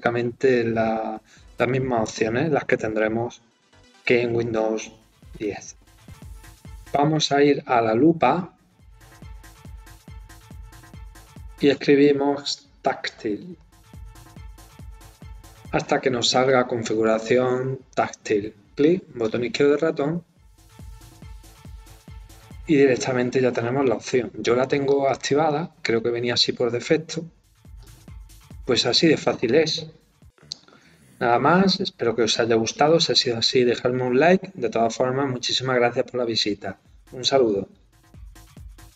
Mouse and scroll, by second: 9.1 click, 18.7 click, 24.8 click, 27.6 click.